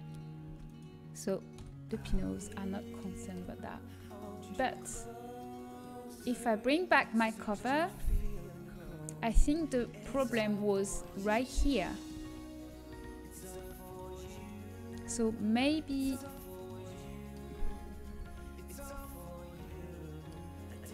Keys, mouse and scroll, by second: 0.4 Tab, 0.6-2.0 right drag, 2.0 middle click, 2.0 h, 5.2-7.3 drag, 7.4 right click, 7.9 Tab, 8.2 right click, 8.6 a, 9.2-11.6 middle drag, 12.2 middle click, 13.4-17.0 middle drag, 15.8 z, 18.0 KP_3, 18.6 z.